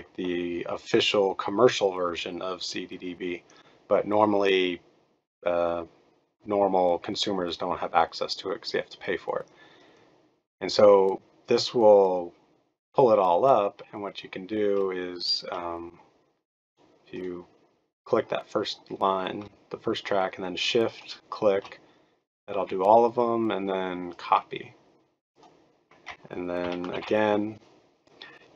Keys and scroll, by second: 26.6 ctrl+a, 26.9 ctrl+v.